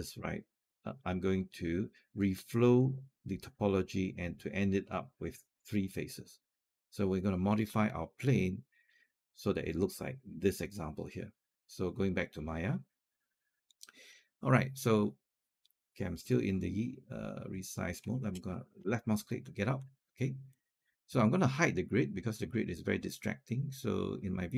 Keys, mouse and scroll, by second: 0.1 scroll up 1, 11.9 click, 13.9-18.6 middle drag, 18.6 click, 20.3 click.